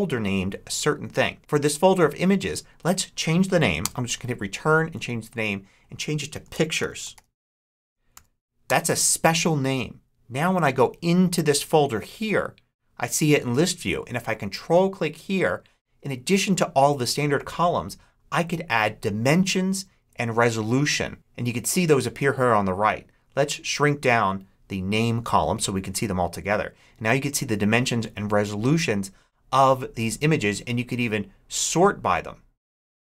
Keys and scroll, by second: 3.7 Return, 6.4-8.0 typing, 8.5 Return.